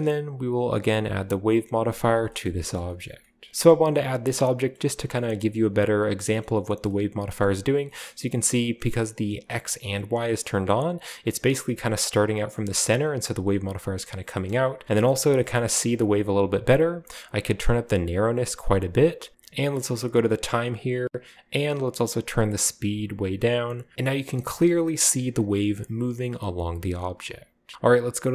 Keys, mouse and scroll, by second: 0.3 click, 0.8-1.5 typing, 2.0 click, 2.5-3.2 scroll up 3, 3.2 scroll down 1, 3.7 middle click, 4.4-5.2 scroll up 2, 5.2-6.2 scroll down 2, 6.4-9.1 scroll up 2, 9.7-11.6 drag, 13.8 scroll down 1, 14.5 middle click, 14.7 space, 14.8 space, 15.2-15.6 middle drag, 15.2-16.1 scroll up 2, 17.5-19.3 drag, 19.9 click, 22.0-23.9 drag, 23.9-25.2 scroll up 1, 24.4-24.8 shift+middle drag, 24.9-25.4 shift+middle drag, 27.0 scroll down 1, 27.1-27.6 middle drag, 27.6 scroll down 1, 27.7 shift+middle click.